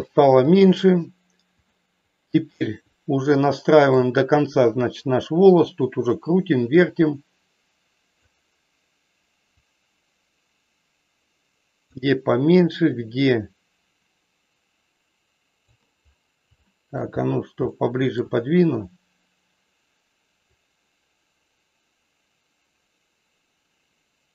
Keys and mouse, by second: 0.6-1.7 drag, 3.5 shift+middle click, 6.0-8.2 drag, 9.5-11.8 drag, 13.0-15.7 drag, 16.6 shift+middle click, 17.8 shift+middle click, 20.5-24.3 drag.